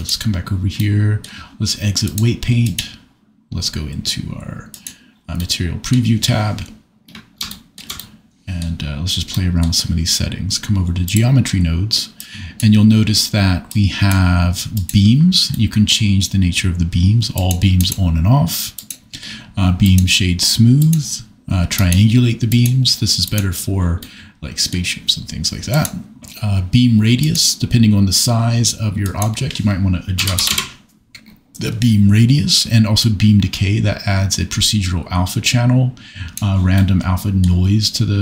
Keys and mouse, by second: 0.0 click, 2.0 click, 4.7 click, 5.4 middle click, 11.0 click, 12.2 click, 14.7 click, 15.5 middle click, 17.4 click, 17.7 click, 20.8 click, 22.5 click, 25.7 click, 27.2-30.5 drag, 33.0-36.3 drag.